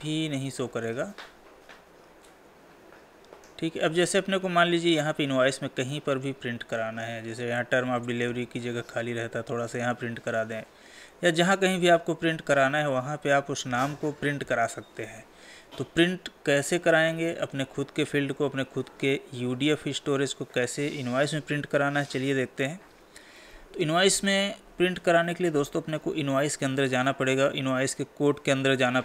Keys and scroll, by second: 14.3 Escape.